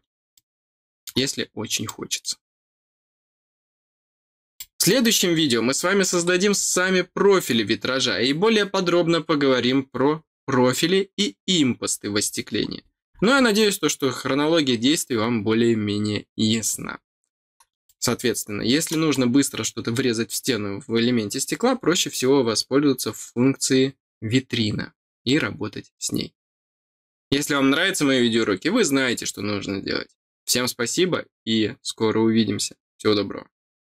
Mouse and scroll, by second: 0.3 middle click, 1.8 middle click, 3.5-3.9 scroll down 2, 4.5 middle click, 6.2 scroll down 2, 6.5 scroll up 1, 7.0 scroll up 2, 12.1-13.4 scroll down 3, 16.5-17.2 scroll down 4, 17.8-18.8 middle drag, 19.4 scroll down 1.